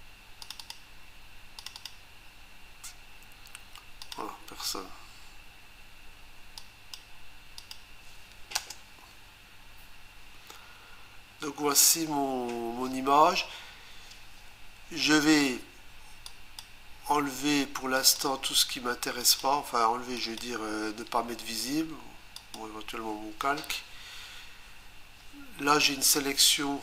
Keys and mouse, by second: 0.4 click, 0.6 click, 0.7 double click, 1.6 click, 1.8 click, 1.9 double click, 4.0 click, 6.6 click, 7.6 click, 8.6 Return, 16.3 click, 17.9 click, 19.2 click, 20.2 click, 22.4 click.